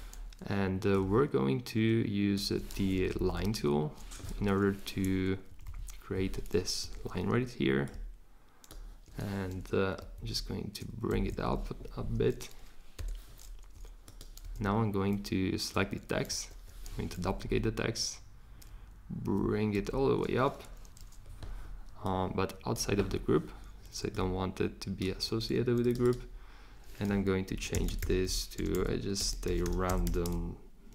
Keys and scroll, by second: 3.1 shift+Up, 3.3 shift+Up, 5.5 Up, 5.6 Up, 6.8 v, 10.1 shift+Up, 11.1 Up, 11.3 Up, 11.4 Up, 13.0 v, 14.4 super+c, 16.3 super+v, 17.2 shift+Down, 17.4 shift+Up, 19.8 shift+Up, 27.5-30.5 typing.